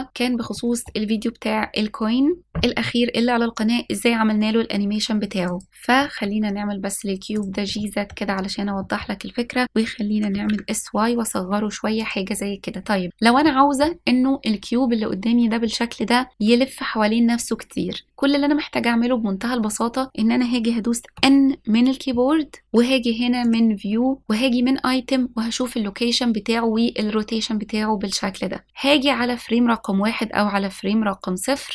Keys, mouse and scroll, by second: 0.4 middle click, 0.4 click, 1.1 scroll down 1, 1.2-2.2 scroll up 2, 2.2 middle click, 5.7 click, 9.4 shift+middle drag, 9.7 scroll down 1, 10.1 middle click, 10.3-11.9 scroll down 1, 11.9 s, 13.5-14.5 scroll up 3, 14.5 scroll down 1, 15.0 middle click, 24.2 click, 25.3 click, 30.5 click.